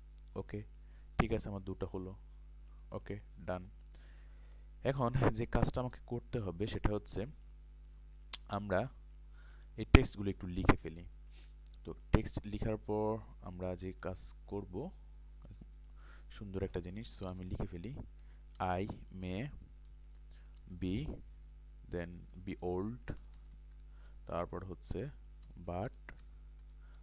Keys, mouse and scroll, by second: 2.9 click, 3.4 ctrl+space, 3.5 click, 4.2 ctrl+click, 8.0 ctrl+space, 8.2 ctrl+click, 8.6 ctrl+click, 15.2 alt+shift+click, 17.3-19.4 typing, 19.8 Return, 20.6-24.0 typing, 25.2-27.0 typing, 26.6 Return.